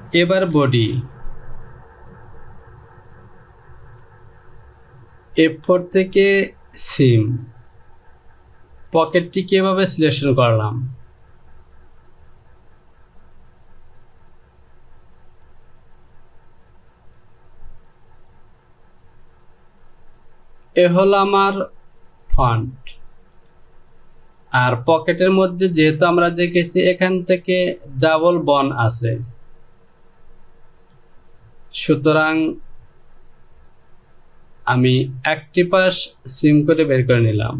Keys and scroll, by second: 1.1 Return.